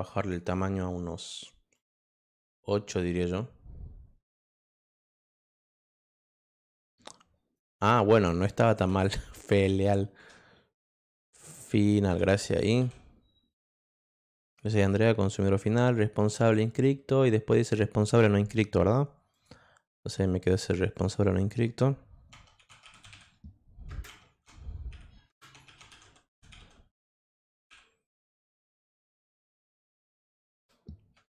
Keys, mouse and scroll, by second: 0.1 click, 1.7 click, 6.1 click, 7.5 click, 9.7 BackSpace, 10.1 BackSpace, 12.2 n, 12.8 a, 19.3 click, 22.3-27.1 typing.